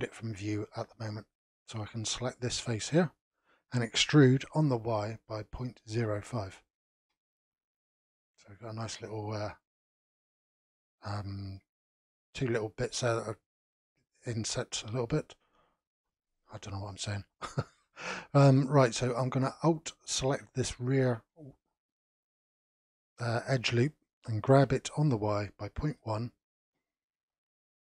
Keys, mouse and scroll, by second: 2.0 click, 4.0 e, 7.8-10.8 middle drag, 12.9-15.9 middle drag, 17.0 2, 19.6 alt+click, 20.5 middle click, 21.3-24.5 scroll down 2, 24.5 g.